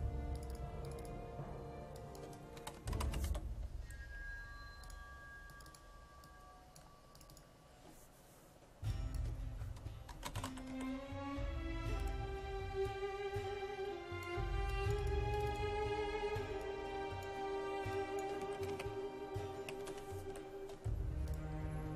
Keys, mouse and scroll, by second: 2.4-3.8 typing, 4.8-7.2 drag, 9.9-11.2 typing, 12.0-17.8 drag, 18.4-20.8 typing, 21.3-21.9 drag.